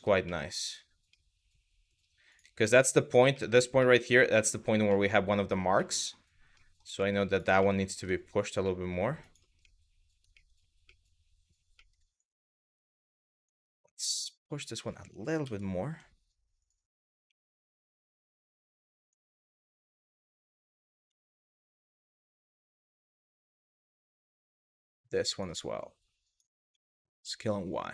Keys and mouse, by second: 0.0 middle click, 0.8-1.6 middle drag, 2.4 middle drag, 3.1 middle drag, 3.5 middle click, 4.1 middle click, 4.6 middle drag, 5.5 middle drag, 6.3 middle click, 6.6 shift+middle drag, 7.3 shift+middle click, 7.6 Tab, 8.4 middle click, 9.3 middle click, 10.0 middle click, 10.5 middle click, 11.4 middle click, 11.9 click, 13.4-14.4 drag, 15.1 s, 15.5 y, 16.2 click, 18.6 click, 19.0 shift+middle click, 19.6 shift+middle click, 20.7 KP_3, 22.4 middle click, 22.9 middle click, 23.9 middle click, 24.5 click, 25.2 click, 26.3 s, 26.7 y, 27.5 click.